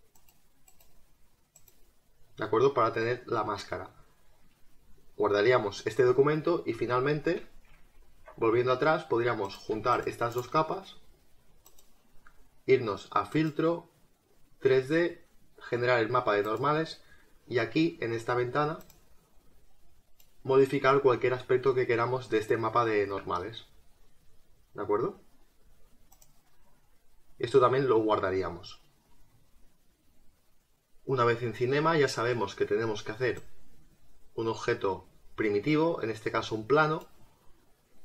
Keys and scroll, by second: 7.1 ctrl+alt+z.